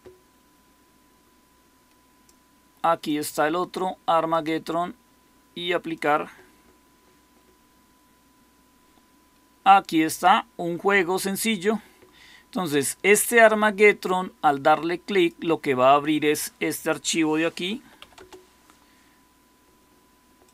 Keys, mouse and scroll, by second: 17.7 typing, 18.1 Return.